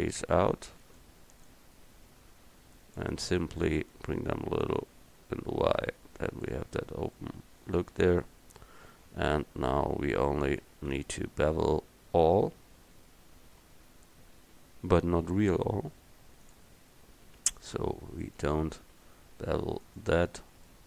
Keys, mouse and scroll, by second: 0.8 e, 4.7-6.5 middle drag, 6.9 Tab, 9.9 Tab, 10.7 a, 11.0 a, 16.5-18.3 drag, 20.7 middle click, 20.8 right click.